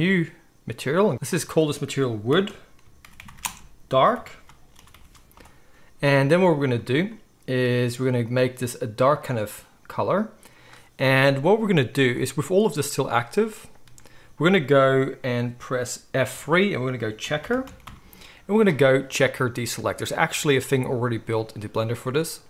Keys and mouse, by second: 1.1 ctrl+z, 1.2 middle click, 1.4-8.4 drag, 3.2 shift+o, 8.4-13.5 middle drag, 13.5-22.4 drag, 16.3 F3.